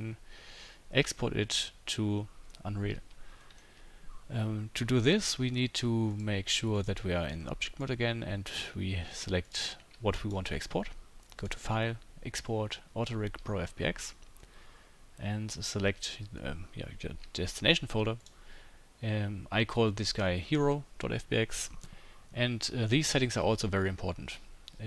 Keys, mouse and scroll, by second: 6.1-9.5 drag, 9.5-10.1 middle drag, 10.1-24.8 shift+drag.